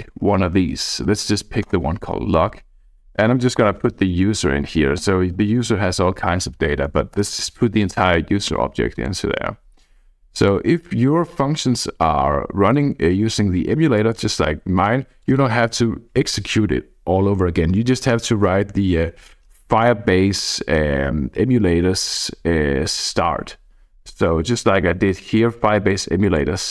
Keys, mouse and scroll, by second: 0.0 Down, 0.3 Down, 0.4 Down, 0.6 Up, 0.7 Up, 0.8 Up, 1.1 Up, 1.7 Return, 3.0 Left, 3.4-5.0 typing, 7.2 BackSpace, 8.9 click, 10.4 click, 11.4-13.1 drag, 13.9-15.0 drag, 15.2 click, 18.4-23.1 scroll up 1, 23.1-24.5 scroll down 1, 24.5-26.2 drag.